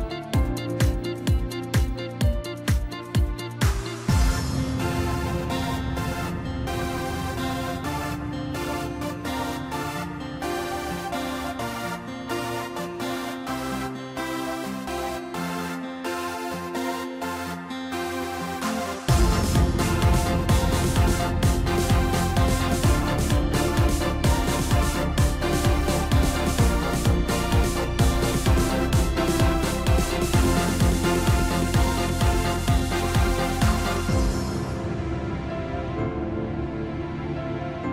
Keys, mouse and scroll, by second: 0.0 shift+click, 0.5 scroll down 1, 1.3 shift+click, 1.5 shift+click, 3.0 ctrl+b, 7.1-9.7 drag, 9.7 Tab, 10.3-11.2 middle drag, 11.2-11.8 scroll down 1, 11.8 KP_1, 12.7-13.8 right drag, 13.8-15.0 middle drag, 15.0 KP_1, 16.3 click, 17.2-18.0 drag, 18.4 scroll up 1, 18.6 scroll down 2, 18.8-20.4 middle drag, 20.4 KP_1, 22.0-22.7 scroll down 1, 22.7-23.5 scroll down 2, 23.5-26.5 drag, 26.5 KP_Divide, 27.5-28.0 scroll down 4, 28.4 drag, 29.5 click, 30.3-32.3 drag, 32.3-33.4 scroll up 2, 33.4 Tab, 34.4 s, 36.8 s.